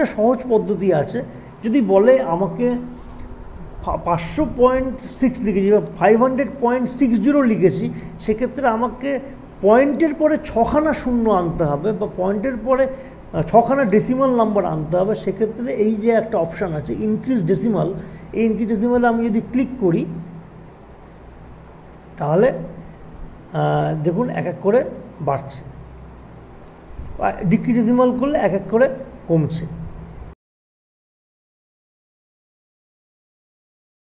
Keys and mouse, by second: 21.9 click, 21.9 click, 29.5 click.